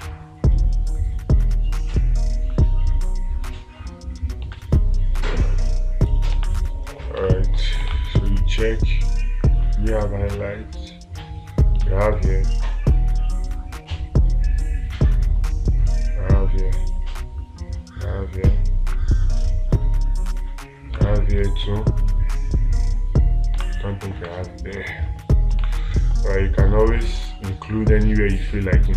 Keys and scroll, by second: 5.0 space, 6.8 space, 12.3 space, 21.4 space, 24.0 space, 24.7 space, 26.1 space.